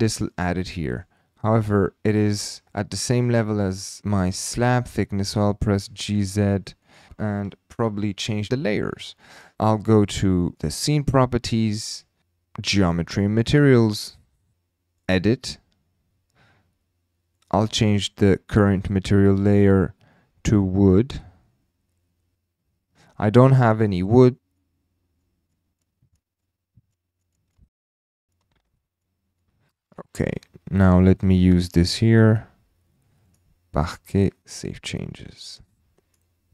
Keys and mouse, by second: 0.3-1.0 middle drag, 0.6 typing, 1.8 shift+middle drag, 2.1 middle click, 5.7 g, 5.8 z, 7.8 KP_Decimal, 8.3 drag, 10.5 click, 15.1 click, 17.3 click, 19.2-22.3 drag, 24.4 click, 25.2 click, 25.5 click, 25.8 click, 26.4 click, 27.5 shift+click, 27.7 BackSpace, 28.3 click, 28.6 o, 29.0 click, 32.1-33.3 drag, 34.6 click, 35.5 click.